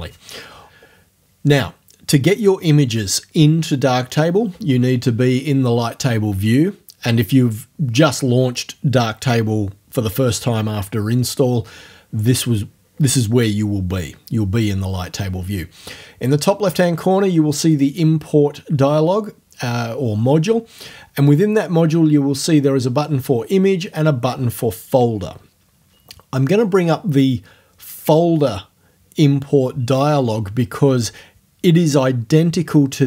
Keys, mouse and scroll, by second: 17.7 click.